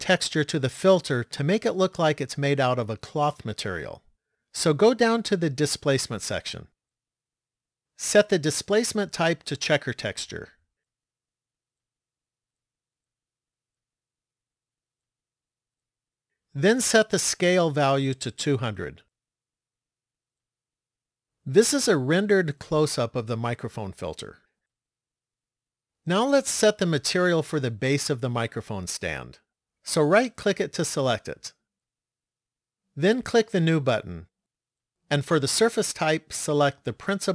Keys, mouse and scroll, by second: 5.9 click, 8.4 click, 15.5 click, 17.9 click, 19.8 KP_0, 30.2 right click, 31.9 click, 33.9 click, 36.0 click.